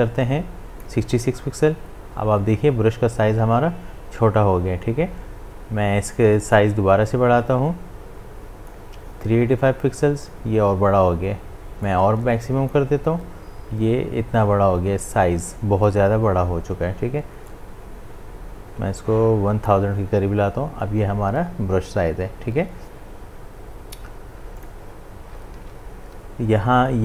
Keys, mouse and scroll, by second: 6.5-10.9 drag, 11.9-15.0 drag, 17.5-21.9 drag, 24.6 click, 25.6 ctrl+z.